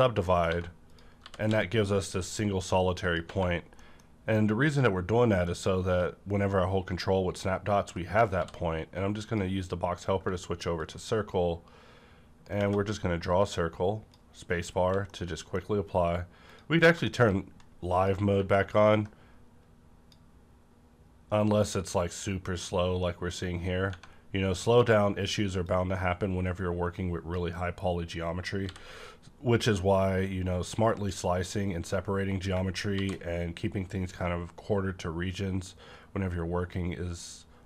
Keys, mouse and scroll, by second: 0.3 middle click, 0.5 1, 0.9 click, 1.2 g, 1.4 x, 3.0 click, 3.2 Tab, 3.5-5.2 scroll down 2, 3.8 middle click, 3.8 middle click, 8.3 d, 9.3 click, 10.8-14.4 drag, 12.6 Left, 14.4-14.8 scroll down 1, 14.8 1, 15.1-16.4 middle drag, 15.1 1, 15.7-16.4 scroll up 1, 16.4 click, 17.0 middle click, 17.3-17.9 scroll up 1, 17.9 click, 18.9-25.6 drag, 23.9 Tab, 25.6 click, 25.7 Tab, 25.7-29.9 drag, 28.6 b, 29.9 scroll down 1, 32.9 shift+f.